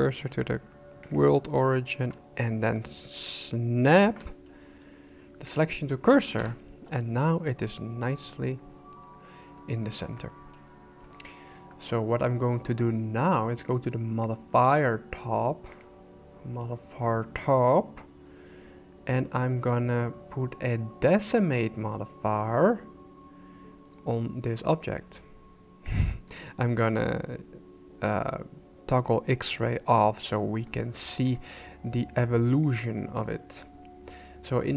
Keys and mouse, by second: 4.0 shift+s, 6.4 KP_1, 9.8 shift+middle click, 11.2 shift+middle click, 15.8-21.3 drag, 25.9 click, 30.7 middle click, 32.6 middle click.